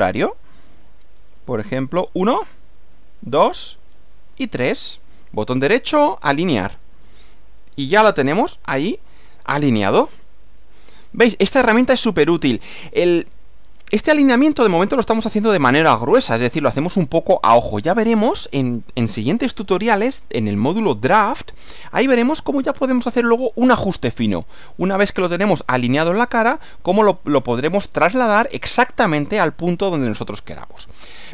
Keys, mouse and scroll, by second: 2.1 click, 3.2 click, 4.3 click, 5.2 right click, 6.0 click, 7.4-8.8 middle drag, 8.5 click, 9.1-10.3 middle drag, 10.4-12.6 middle drag, 13.0-15.1 middle drag, 29.8-31.0 middle drag.